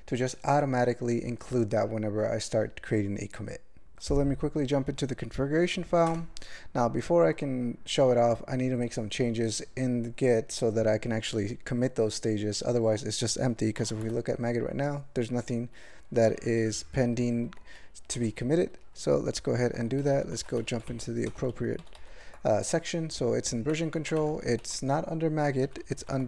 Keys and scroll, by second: 6.1 Return, 18.7 q, 20.4-20.9 typing, 21.8 ctrl+l, 21.9 ctrl+l, 23.4 ctrl+e, 23.7 ctrl+n, 23.8 ctrl+n, 24.2 alt+m, 24.6 ctrl+alt+f, 25.6 ctrl+n, 25.8 ctrl+n, 26.0 ctrl+n.